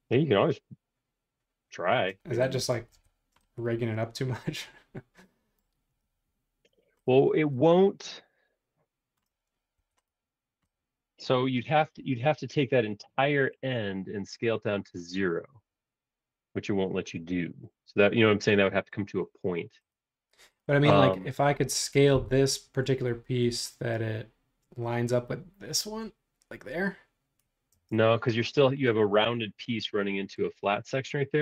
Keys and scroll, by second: 2.7 space, 2.9 o, 22.1 s, 27.7 space.